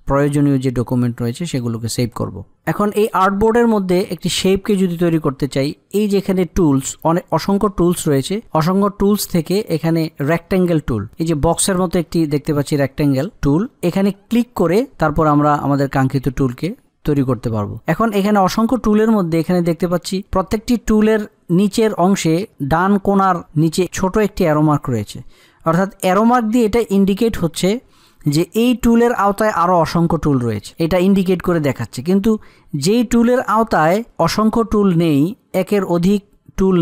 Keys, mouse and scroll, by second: 2.3 F8.